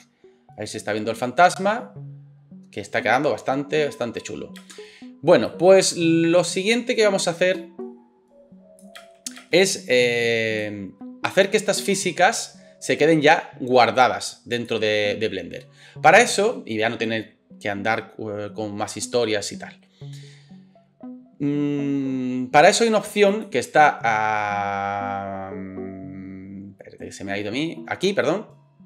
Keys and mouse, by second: 4.6 space, 9.0 space, 9.4 space, 23.4-28.8 middle drag.